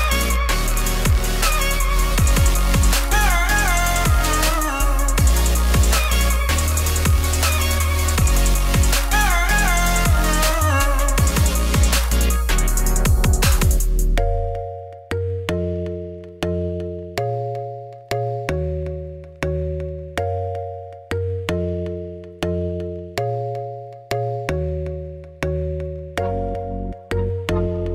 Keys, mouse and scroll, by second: 0.4 z, 1.7 click, 3.0 click, 6.4-6.7 scroll up 3, 8.0 click, 9.1 click, 12.5-16.7 drag, 16.7 alt+h, 17.0 click, 20.4-26.8 drag, 26.8 ctrl+s, 27.8 click.